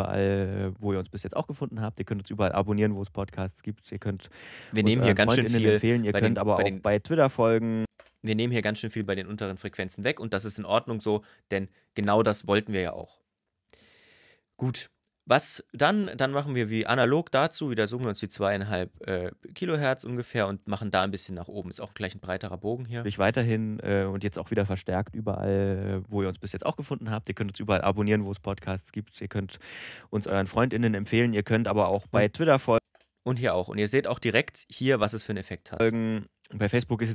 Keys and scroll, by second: 6.5 space, 22.8 space, 31.6 space, 35.6 space.